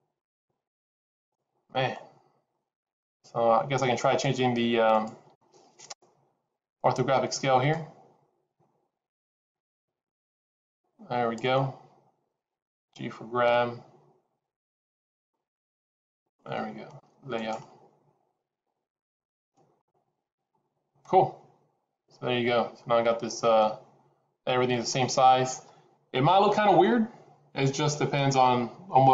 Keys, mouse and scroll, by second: 18.8 click, 19.7-20.6 scroll up 5.